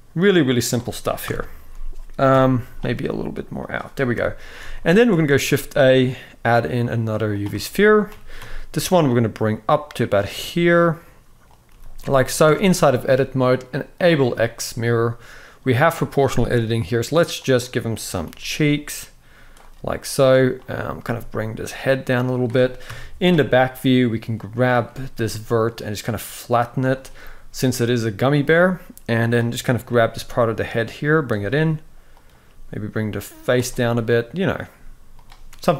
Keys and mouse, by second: 0.9 KP_1, 2.0 KP_7, 2.6 r, 3.8 KP_1, 4.4 alt+a, 4.7 shift+middle click, 5.0 shift+a, 7.3 shift+middle drag, 7.8 g, 10.1 s, 11.4 g, 12.1 Tab, 13.6 click, 14.1 shift+middle click, 17.2 click, 17.9 g, 20.3 click, 20.7 g, 22.5 KP_3, 23.4 click, 24.6 g, 28.9 click, 29.6 g, 31.9 click, 32.2 g, 34.2 click, 34.4 g.